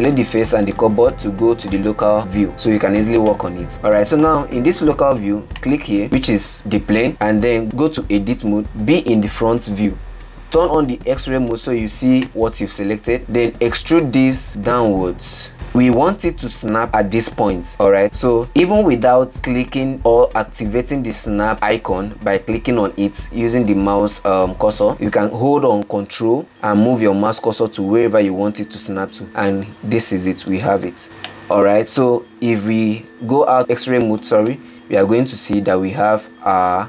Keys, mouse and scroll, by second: 0.8 click, 1.4 shift+click, 1.9 click, 3.2 /, 4.2 scroll down 1, 4.3-6.4 middle drag, 6.4 click, 7.9 Tab, 10.0 KP_7, 12.4 alt+z, 13.6 click, 13.7 e, 31.1-32.2 middle drag, 32.2-33.4 scroll down 5, 33.5-34.7 middle drag, 34.7 alt+z, 35.1-36.0 scroll up 5, 36.0 shift+scroll up 1, 36.3-36.8 shift+middle drag.